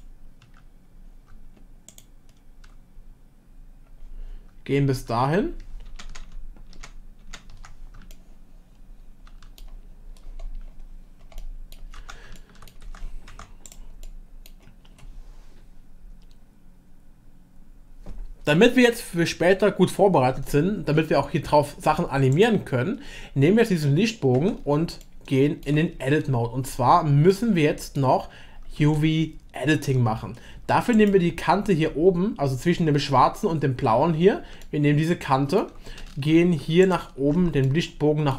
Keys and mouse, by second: 5.9 ctrl+z, 6.1 ctrl+z, 6.3 ctrl+z, 6.7 ctrl+z, 7.2 ctrl+z, 8.1-9.6 shift+middle drag, 11.4-11.7 middle drag, 12.0 Tab, 12.4-12.7 shift+middle drag, 13.0 Tab, 13.4 Tab, 14.0 middle click, 22.3 click, 24.4 Tab, 25.0 shift+middle click, 27.3-28.6 middle drag, 28.9-29.9 shift+middle drag, 34.6-35.7 shift+middle drag, 37.7 shift+click.